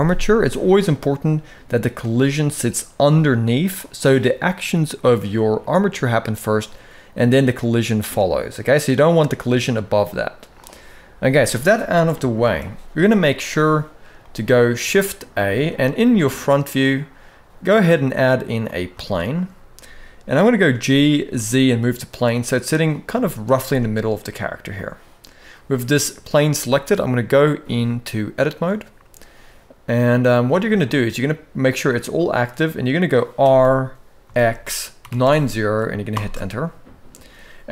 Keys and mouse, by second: 0.6-3.5 drag, 8.8-10.3 drag, 11.3 middle click, 11.8 KP_1, 12.2 alt+a, 12.9-13.2 shift+middle drag, 13.9-14.2 shift+middle drag, 15.1 alt+a, 18.7 shift+middle click, 20.4 g, 22.9 shift+middle drag, 23.3-23.8 middle drag, 24.4-25.2 middle drag, 27.2-28.2 drag, 29.8 click, 30.4 middle click, 31.9 middle click, 33.1 r.